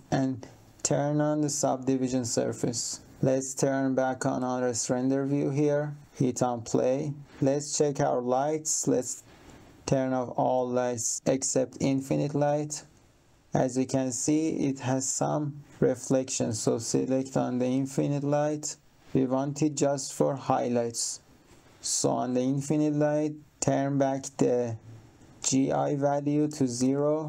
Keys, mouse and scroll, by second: 3.0 click, 3.3 click, 6.0 click, 9.6 click, 10.4 click, 16.4 click, 26.1 click, 26.7 0, 26.9 Return.